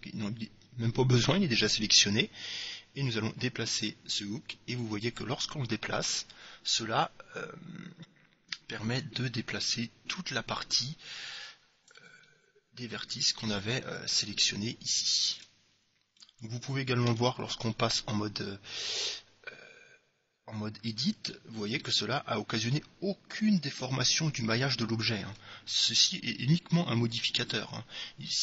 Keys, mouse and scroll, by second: 2.1-4.1 middle drag, 4.1-5.9 drag, 12.4-14.4 middle drag, 14.4 Tab, 15.5 Tab, 16.3-19.8 middle drag, 17.2 Tab, 25.4 Tab, 27.5-28.4 drag.